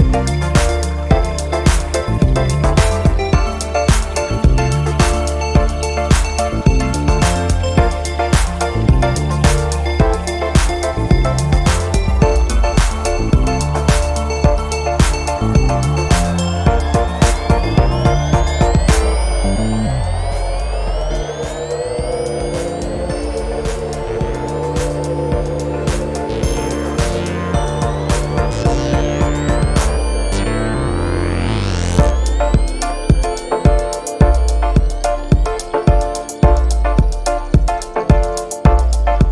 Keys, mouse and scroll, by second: 0.0 click, 2.0 click, 4.3 click, 6.1 click, 10.7 click, 13.6 click, 15.3 click, 16.5 click, 17.4-18.6 typing, 20.7 click, 21.9 -, 23.0 click, 24.6 scroll down 1, 28.1 click, 30.1 click, 33.8 click, 35.0 click, 36.0 click, 37.2 BackSpace, 38.8 Right.